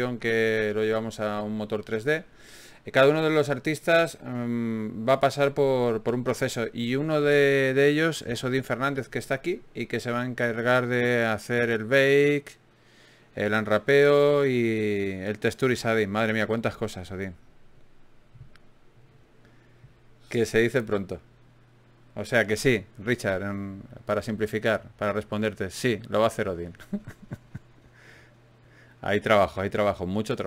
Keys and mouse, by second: 7.8 middle click, 8.8 ctrl+Tab, 10.0 right click, 10.5 middle click, 11.5 middle click, 14.2 shift+d, 16.2 click, 18.1-19.5 drag, 19.9-23.3 drag, 22.3 e, 24.0-25.4 drag, 25.4 g, 27.2 g, 27.7 middle click, 29.1 g, 30.1 g.